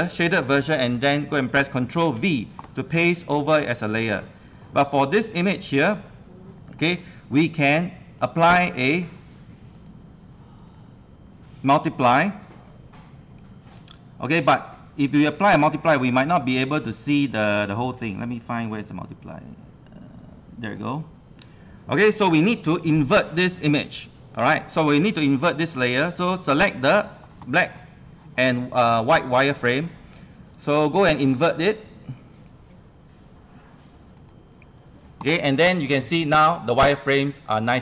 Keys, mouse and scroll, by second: 2.1 ctrl+v, 2.3 ctrl+v, 3.0 ctrl+v, 3.5-21.8 drag, 34.3 click.